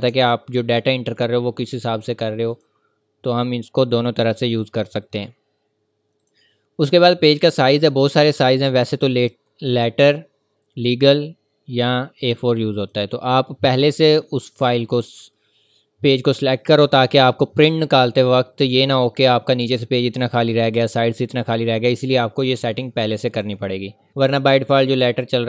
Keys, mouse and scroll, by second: 0.1-0.5 ctrl+scroll down 1, 1.9 click, 3.7-4.5 scroll up 1, 4.5 click, 7.4-8.3 scroll down 1, 8.3-9.9 scroll up 1, 12.8 click, 14.1 scroll down 1, 14.7-15.1 scroll up 1, 15.1 ctrl+v, 22.2 click.